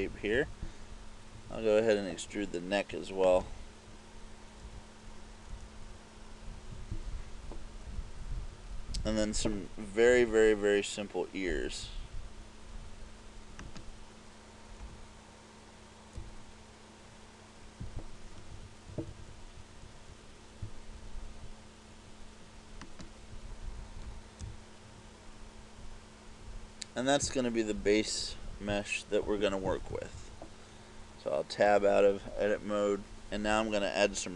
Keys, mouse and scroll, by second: 0.1 KP_2, 0.4 KP_2, 3.5 right click, 4.7 e, 7.0 click, 8.0 KP_2, 8.2 KP_2, 8.4 KP_2, 9.6-10.6 typing, 12.0 KP_6, 13.8 right click, 14.9 e, 18.1 click, 18.6-20.2 typing, 23.1 right click, 24.1 e, 27.6 click, 29.6 KP_6, 29.7 KP_6, 30.0 KP_6, 30.2 KP_6, 31.8 Tab.